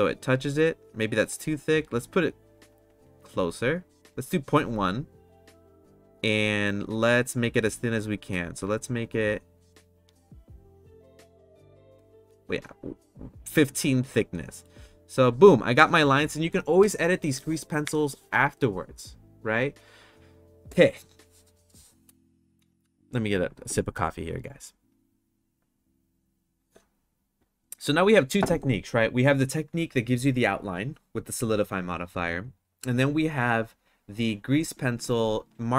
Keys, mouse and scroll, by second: 0.1 click, 1.5 click, 1.8 click, 2.6 click, 2.8 click, 3.1 click, 3.3 click, 3.6 click, 3.7 click, 5.4 click, 6.5 click, 6.7 click, 7.3 click, 7.5 click, 9.1 click, 9.5 click, 10.2 click, 11.2 click, 14.3 middle drag.